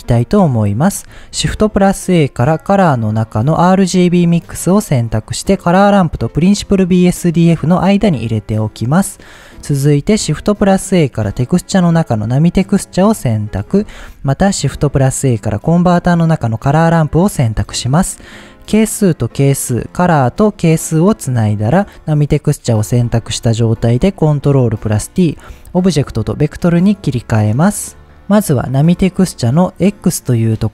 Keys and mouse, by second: 0.1 click, 1.4 shift+a, 8.9 middle click, 9.9 shift+a, 13.9 shift+a, 17.9-19.0 drag, 19.7-21.5 drag, 22.1 click, 23.6 ctrl+t, 24.2 click, 25.5-26.2 middle drag, 26.5-26.9 right drag, 27.1-27.9 right drag, 30.2-30.7 right drag.